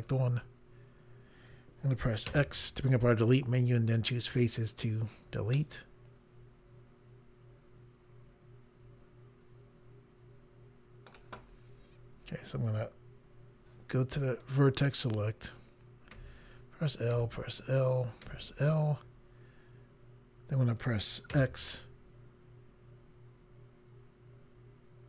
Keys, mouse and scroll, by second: 2.3 x, 4.0 click, 5.6 middle click, 14.4 click, 16.2 l, 17.2 l, 18.3 l, 21.4 x.